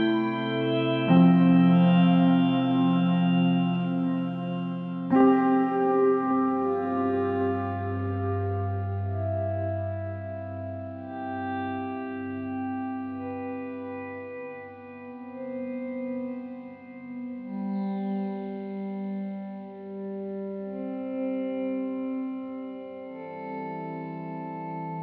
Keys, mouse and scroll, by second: 14.5-15.7 middle drag, 15.7-16.1 scroll up 2, 16.1-19.0 middle drag, 19.3-19.7 scroll down 3, 19.7-25.0 middle drag.